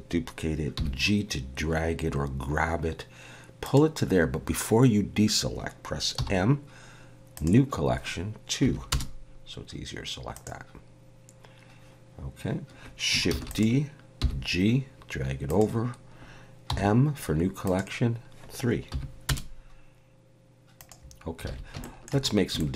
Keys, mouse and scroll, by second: 0.8 g, 6.1 m, 13.3 shift+d, 14.2 g, 16.7 m, 21.5 alt+a, 21.8 shift+middle click, 22.3 scroll up 2, 22.6 shift+middle click.